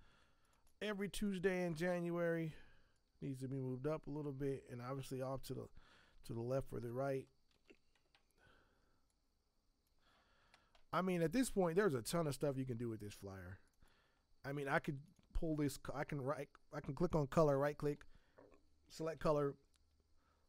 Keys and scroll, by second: 1.9 Escape, 7.5 ctrl+t.